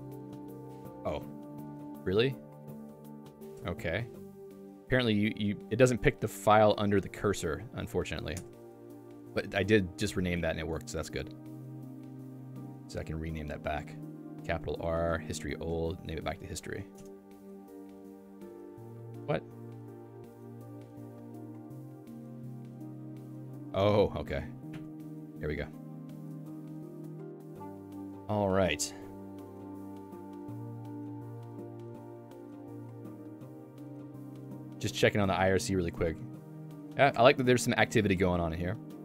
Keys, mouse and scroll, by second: 30.8 click.